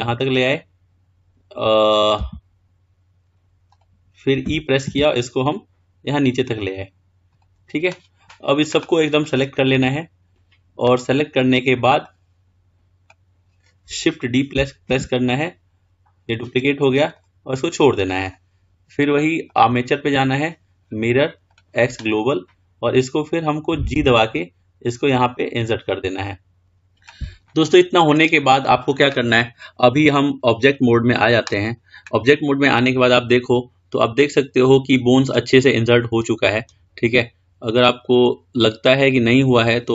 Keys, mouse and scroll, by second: 5.3 e, 9.4 click, 12.3 click, 15.1 shift+d, 19.7-22.5 drag, 27.1-27.8 scroll down 4, 27.8-30.3 middle drag, 30.3-32.5 drag, 32.5-35.3 middle drag.